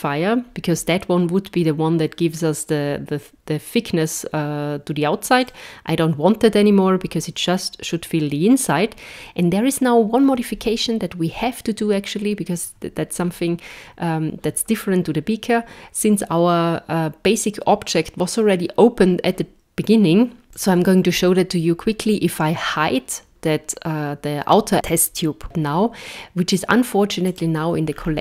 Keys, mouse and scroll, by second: 5.4 click, 20.4 click, 20.4 scroll up 4, 20.5 click, 27.2 click, 27.9-28.2 scroll down 14.